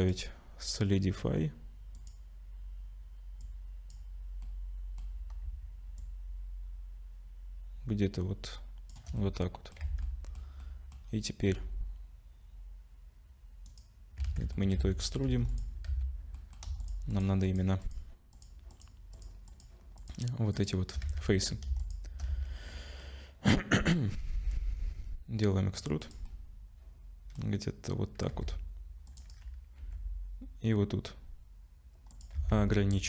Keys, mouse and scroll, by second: 0.0 click, 3.4 click, 4.5 middle click, 6.0 shift+click, 9.2 middle click, 9.8 Tab, 10.0 middle click, 10.6 middle click, 11.0-11.6 scroll up 3, 11.5 e, 14.3 ctrl+z, 14.7 middle click, 15.3 3, 15.5 click, 15.9 z, 16.4 middle click, 16.8 shift+click, 17.1 shift+click, 17.4 click, 17.8 click, 18.3 click, 18.9 shift+click, 19.1 shift+click, 19.5 shift+click, 20.0 shift+click, 20.5 shift+click, 21.0 z, 21.8 shift+click, 22.3 z, 22.7 middle click, 24.2 e, 26.3 middle click, 28.3 ctrl+r, 29.8 ctrl+b, 32.4 Tab, 32.5 middle click.